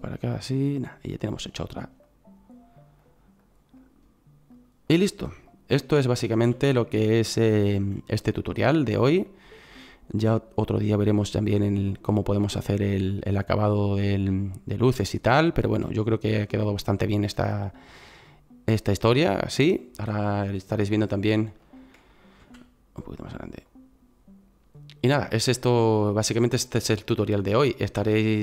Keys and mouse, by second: 1.5 right click, 6.5 s, 13.8-15.2 middle drag, 22.4 s.